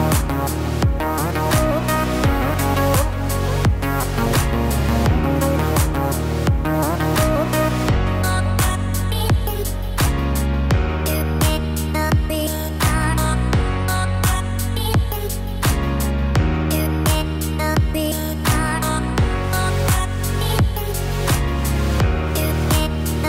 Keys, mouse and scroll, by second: 1.4 click, 2.4 click, 3.3 shift+a, 7.0 Tab, 7.9 r, 10.6 g, 16.3 ctrl+r, 18.1 click, 19.0 click, 20.3 x, 21.9 click, 22.4-22.9 scroll up 4, 23.1 shift+middle click.